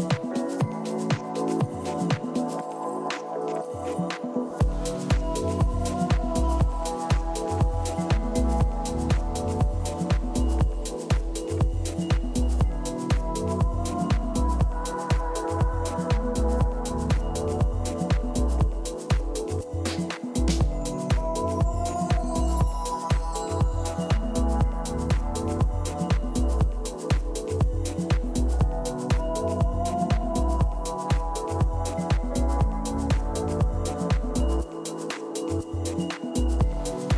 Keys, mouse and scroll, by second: 1.7 a, 2.2-5.1 middle drag, 5.3 z, 6.6-8.6 middle drag, 9.3 KP_1, 10.3 z, 10.8-14.9 middle drag, 26.0-32.3 middle drag, 32.3 KP_3, 34.6-37.1 middle drag, 36.0-37.1 typing.